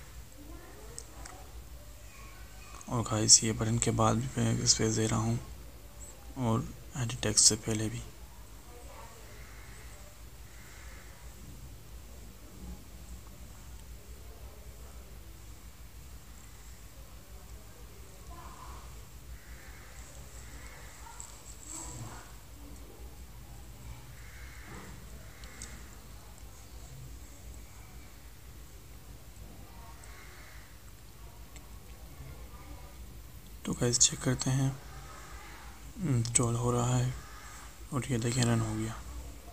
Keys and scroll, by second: 3.9 ctrl+v, 7.6 ctrl+v.